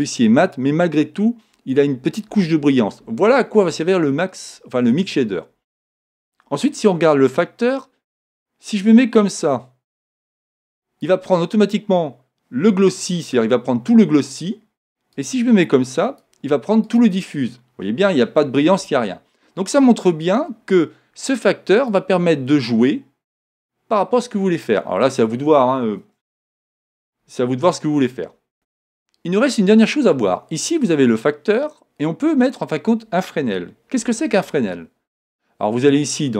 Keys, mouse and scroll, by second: 8.3-10.2 drag, 15.2-18.6 drag, 23.2 click, 34.0 shift+a.